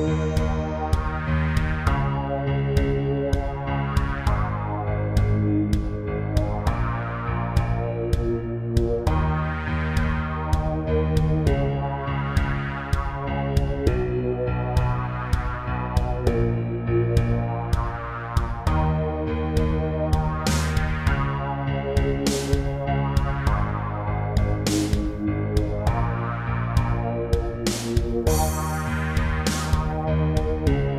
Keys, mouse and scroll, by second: 0.7 click, 2.0 click, 2.5 middle click, 5.9 e, 6.5 z, 7.7 click, 8.1 middle click, 9.0 e, 9.6 z, 10.8 click, 11.1 middle click, 11.5 scroll up 2, 11.8 middle click, 13.2 click, 13.7 middle click, 15.0 scroll up 3, 15.5 shift+middle click, 15.9 middle click, 17.6 typing, 18.7 click, 19.1 middle click, 19.5 scroll up 3, 20.0 shift+middle click, 21.5 click, 21.6 click, 22.1 scroll down 2, 23.2 middle click, 24.3 shift+middle click, 25.3-25.6 typing, 26.7 x, 27.4 click, 28.0 scroll up 3, 29.0 middle click, 30.0 z, 30.7 click.